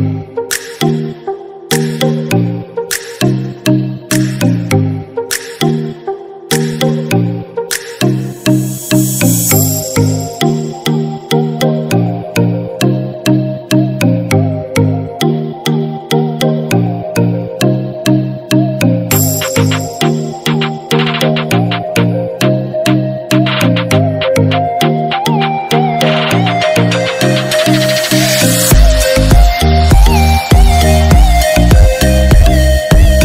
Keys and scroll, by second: 2.9 ctrl+-, 16.1 ctrl+=.